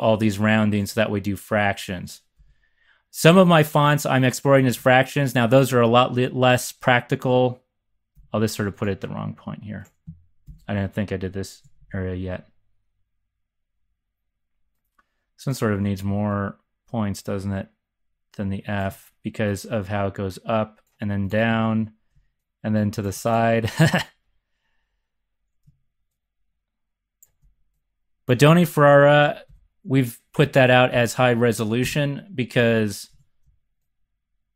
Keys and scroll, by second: 2.3 z, 4.6 z, 8.1 3, 10.4 1, 11.6 z, 11.8 z, 21.5 x, 29.1 Right, 29.4 Up, 30.3 Down, 30.9 x, 31.8 x, 32.6 z, 33.1 z.